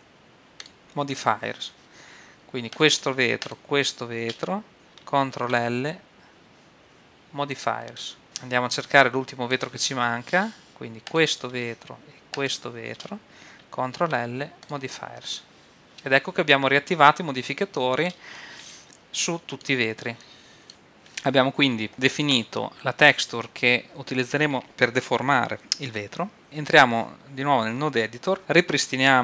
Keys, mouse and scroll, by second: 3.0-5.1 right drag, 5.4 ctrl+l, 8.2 middle click, 8.9-11.4 middle drag, 11.4-14.3 right drag, 14.0 ctrl+l, 17.6-20.1 middle drag, 26.0-27.8 middle drag, 28.4 middle click.